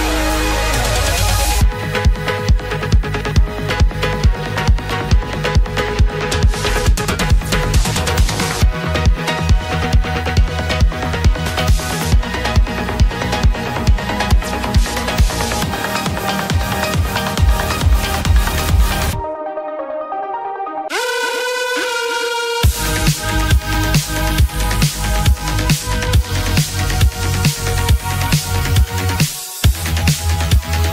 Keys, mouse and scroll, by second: 6.4-7.3 scroll down 11, 14.6-16.3 typing, 16.9 Return, 18.8 scroll, 19.3 scroll up 3.